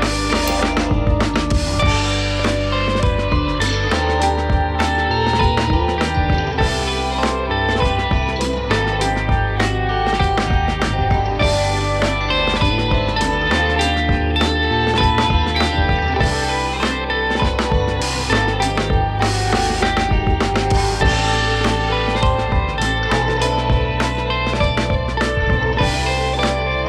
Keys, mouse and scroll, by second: 0.2 click, 1.0 Tab, 1.6 a, 2.7 e, 7.3 scroll down 1, 7.4 middle click, 8.0 scroll up 1, 8.2 middle click, 8.9 click, 10.0 KP_1, 10.5-11.2 scroll down 1, 11.2 Tab, 11.4 click, 11.8-12.4 shift+middle drag, 12.4-12.9 scroll up 2, 12.9-13.3 shift+middle drag, 13.3 Tab, 13.6 scroll up 1, 13.8 Tab, 13.9 click, 14.2 Tab, 16.4 k, 22.2 click, 23.2 ctrl+shift+b, 25.9 k.